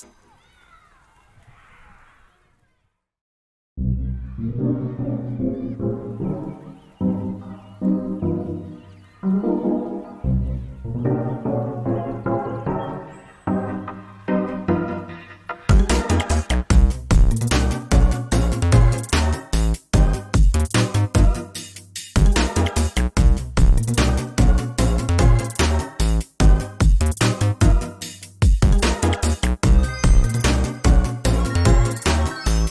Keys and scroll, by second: 0.7 ctrl+space, 7.7 ctrl+space, 10.6 ctrl+space, 11.5 ctrl+space, 19.2 ctrl+space, 28.3 ctrl+space, 31.6 ctrl+x.